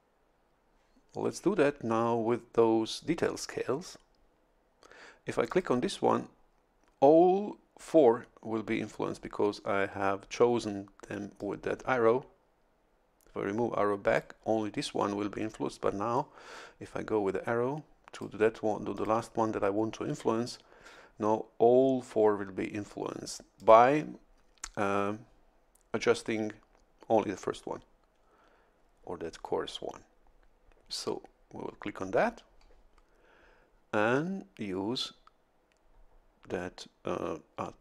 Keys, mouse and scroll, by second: 5.5 click, 11.4-14.4 drag, 16.2-18.4 drag, 18.9 click, 23.6 click.